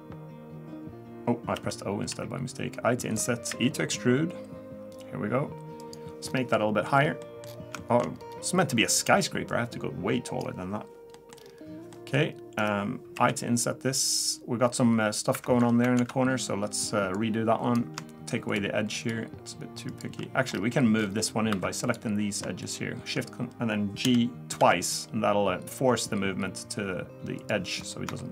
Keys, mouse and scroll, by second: 1.5 o, 2.1 i, 3.5 e, 6.2-6.5 scroll down 5, 6.5 middle click, 6.9-7.5 scroll up 5, 7.2 middle click, 7.5-7.8 scroll down 2, 7.8 shift+middle click, 8.1-8.7 scroll up 1, 9.5 click, 11.1 middle click, 11.4-11.7 scroll up 1, 11.9 middle click, 11.9 scroll up 3, 13.1 i, 16.0 ctrl+z, 17.1 click, 18.5 shift+click, 20.2 middle click, 20.5-21.0 scroll up 1, 21.0 scroll down 2, 21.1 scroll down 2, 21.5 2, 21.8 click, 22.6 shift+click, 24.0 g, 27.8-28.2 scroll up 2, 28.2 shift+middle click.